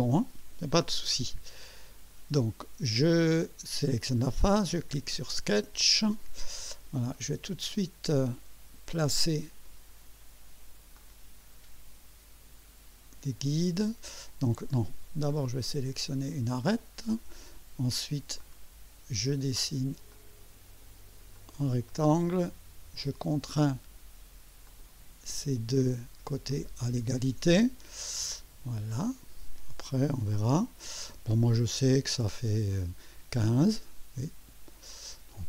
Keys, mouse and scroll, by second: 5.5 click, 6.4-6.8 scroll up 1, 7.1 right click, 11.0 click, 15.3 click, 16.6 click, 18.4 click, 20.1 click, 21.3 click, 21.8 middle click, 23.5 click, 24.6 click, 26.5 click, 28.9-30.6 drag, 32.7 click, 34.9 click.